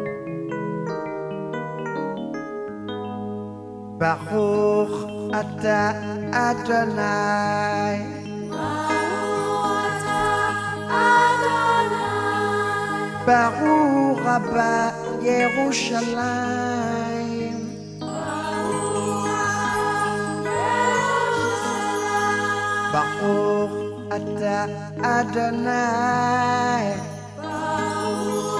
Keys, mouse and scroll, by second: 1.4 shift+click, 3.8 click, 5.6 ctrl+click, 8.9 click, 11.0-11.4 alt+scroll up 1, 12.9 ctrl+click, 16.4 click, 23.1 click.